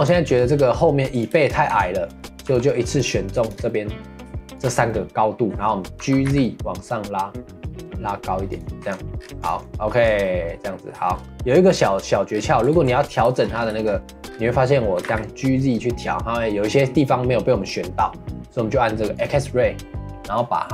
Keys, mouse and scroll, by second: 0.1-1.1 shift+middle drag, 1.1 click, 1.3-1.7 shift+middle drag, 1.7 Tab, 2.0 middle click, 2.4 3, 3.0 click, 3.4 shift+click, 3.6 middle click, 4.5 shift+click, 4.8-5.9 middle drag, 5.9 g, 9.2 scroll down 1, 9.4 click, 9.6-10.0 middle drag, 10.0 scroll down 2, 10.2-11.3 middle drag, 11.3-11.8 scroll down 1, 11.8 shift+middle click, 12.3 scroll down 1, 12.5 middle click, 12.7 ctrl+s, 13.3 shift+middle click, 13.5 scroll up 3, 13.8 shift+middle click, 14.3 scroll down 2, 14.5 middle click, 14.9 g, 19.1-20.4 drag.